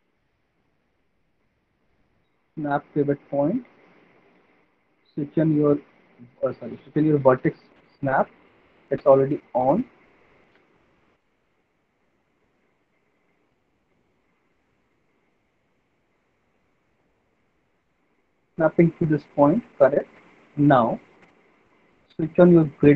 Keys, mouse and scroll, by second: 1.3 click, 2.3 click, 6.0 click, 6.8 middle click, 8.1 right click, 9.8 middle click, 10.5 alt+middle click, 10.8 alt+middle click, 10.9 middle click, 11.3 middle click, 12.0 alt+middle click, 12.6 alt+middle click, 13.0 middle click, 15.8 click, 16.7 alt+middle click, 16.9 middle click, 17.1 middle click, 17.3 middle click, 17.5 alt+middle click, 18.5 middle click, 20.2 click, 21.2 middle click, 22.0 right click.